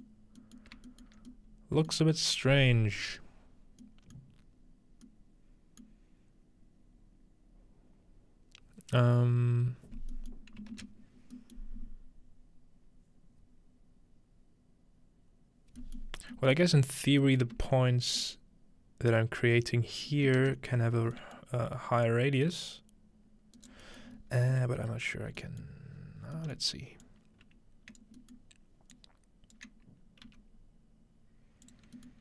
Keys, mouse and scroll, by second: 0.8 shift+middle drag, 1.2 shift+middle click, 2.4-3.8 middle drag, 4.2 middle click, 4.5 scroll down 1, 5.6 scroll down 1, 5.9-9.9 middle drag, 9.9-10.4 scroll down 2, 10.4 ctrl+middle click, 10.7 ctrl+space, 11.0-11.6 scroll down 1, 20.7-21.1 scroll down 3, 22.1-23.8 drag, 23.6 right click, 23.8-25.9 scroll up 2, 25.9-26.6 scroll down 2, 26.6 middle click, 27.0-28.0 drag, 28.3 shift+middle click, 28.3-28.9 scroll down 1, 28.9 shift+click, 30.3 g, 31.0 click, 31.7-32.2 drag.